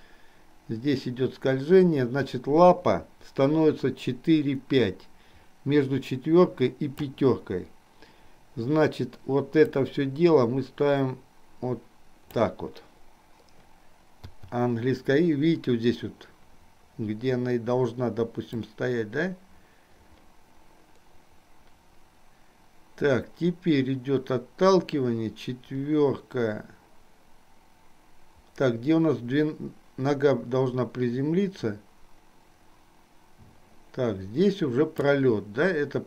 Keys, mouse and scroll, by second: 9.8-12.9 drag, 18.8-35.3 drag.